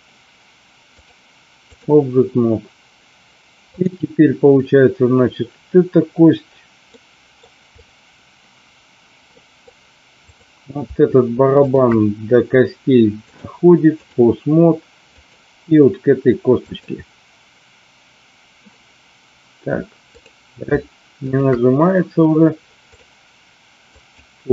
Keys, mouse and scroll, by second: 0.9 click, 3.7 click, 7.0 middle click, 7.7 click, 9.4 middle click, 11.6 shift+click, 13.3 click, 20.1 click, 21.2 shift+click, 22.9-24.2 drag.